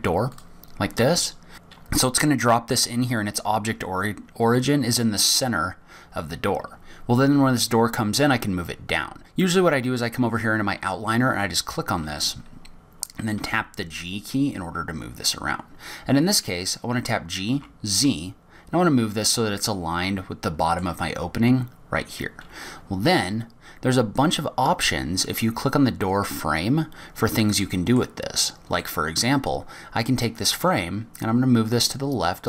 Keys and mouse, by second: 9.2 right click, 10.8 right click, 12.8 g, 20.5-21.6 middle drag, 26.1 click, 28.4 middle click, 29.6 middle click.